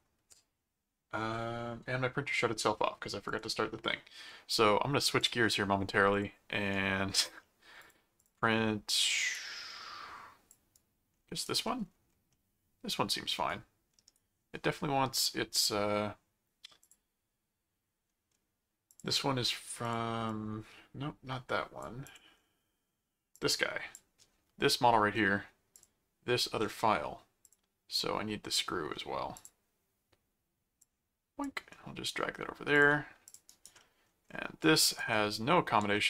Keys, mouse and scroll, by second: 3.2 click, 5.2 click, 6.1 click, 6.7 right click, 7.4 middle click, 7.8 click, 8.4 r, 9.3 click, 10.7 right click, 11.6 middle click, 12.3-13.3 middle drag, 13.5 right click, 16.8 click, 18.9 click, 19.8-21.8 drag, 22.0 click, 23.3 click, 25.7 click, 27.4 click, 29.3 click, 30.8 click, 32.1-32.6 scroll up 2, 32.7 click, 33.4 right click, 33.8 middle click, 34.6 right click, 35.1 middle click, 35.7 r.